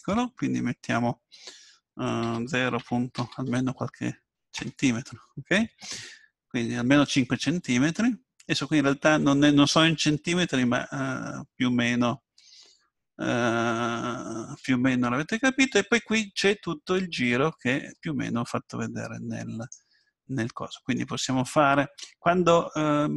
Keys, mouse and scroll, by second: 20.0-22.2 middle drag.